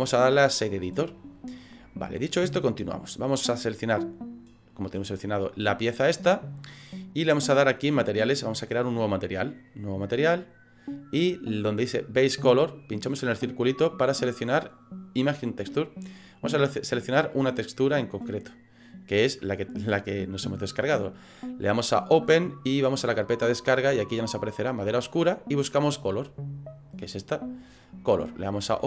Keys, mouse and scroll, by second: 10.0 click.